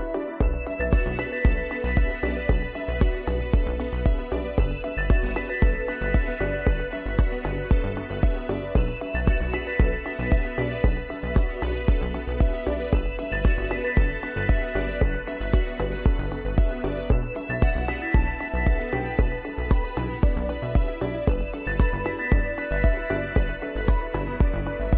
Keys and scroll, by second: 7.8 ctrl+z, 23.2 ctrl+shift+=.